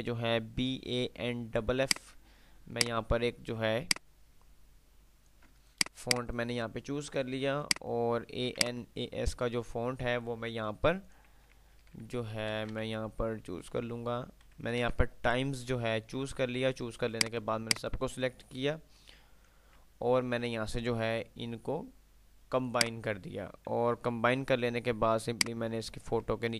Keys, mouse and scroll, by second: 2.1-5.8 drag, 5.8 F2, 6.3 click, 6.6 F2, 7.8 click, 8.8-9.8 alt+drag, 12.5-13.4 typing, 13.9 Down, 14.6 Up, 14.9 Return, 17.3-18.4 drag, 20.1 ctrl+q, 22.9 click, 23.8 F3, 25.3-26.3 drag.